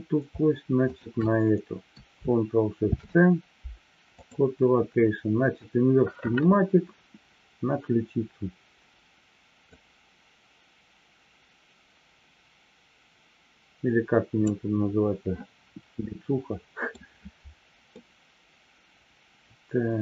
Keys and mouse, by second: 2.8 ctrl+shift+c, 9.5-14.5 drag, 16.1-16.9 middle drag, 17.9-20.0 middle drag.